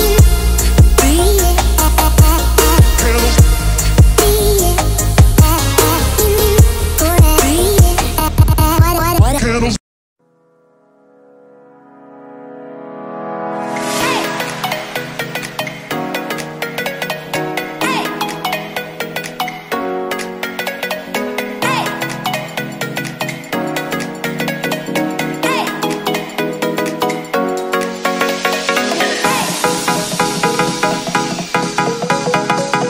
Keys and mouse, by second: 0.0 a, 1.6 click, 4.4 click, 4.9 a, 6.5 ctrl+l, 10.9 ctrl+drag, 12.4 ctrl+l, 15.4 ctrl+s, 15.7 a, 15.9 a, 18.4 shift+click, 20.2 click, 23.6 click, 26.3 click.